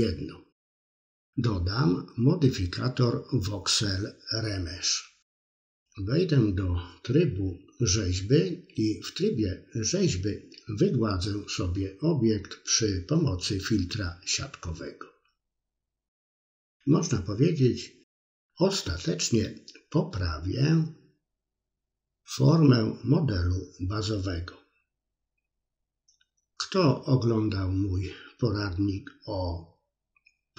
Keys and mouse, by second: 0.4-4.0 drag, 4.1 middle click, 5.4 click, 6.0 middle click, 6.7 middle click, 8.4-9.5 drag, 9.8 middle click, 10.2 click, 10.8 click, 11.2 click, 11.5 middle click, 12.1 click, 12.3 middle click, 13.7 click, 14.2-15.6 middle drag, 15.6 middle click, 15.9 click, 16.1 middle click, 16.5 middle click, 16.9 middle click, 18.1 click, 19.2 middle click, 19.4 click, 19.7 click, 19.9 click, 20.1 middle click, 21.1-21.8 drag, 22.0 middle click, 23.5 shift+click, 24.5 click, 24.8 shift+click, 25.4 shift+click, 25.9 middle click, 26.2 shift+click, 26.6 middle click, 26.9 shift+click, 27.3-28.3 middle drag, 28.5 KP_1, 28.7 middle click, 30.3-30.5 drag.